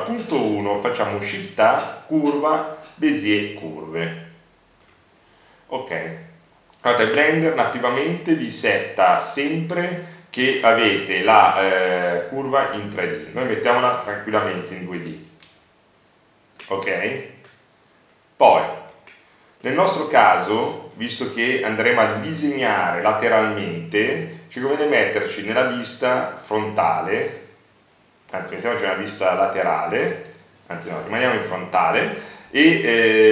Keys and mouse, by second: 0.4 shift+a, 9.0 click, 17.7 middle click, 18.5 middle click, 18.8-21.1 middle drag, 21.1-24.8 middle drag, 24.8 KP_1, 27.3 KP_3, 30.6 KP_1.